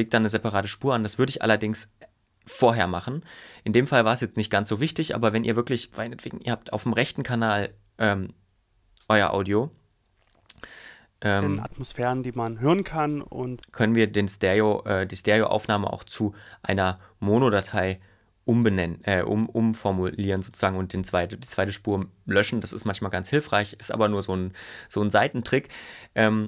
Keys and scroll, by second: 11.3 space, 13.6 space, 14.7 super+y.